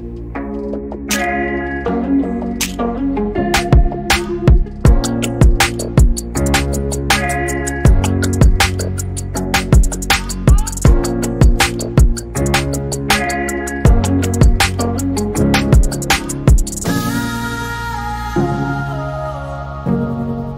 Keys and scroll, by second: 1.8 f, 4.0-7.5 typing, 14.0-18.4 typing.